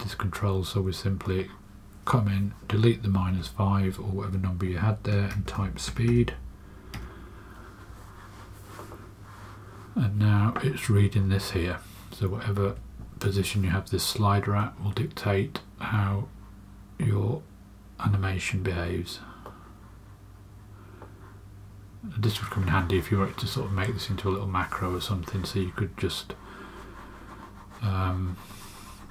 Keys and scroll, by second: 3.0 BackSpace, 3.2 BackSpace, 5.0-6.5 typing, 12.5 space.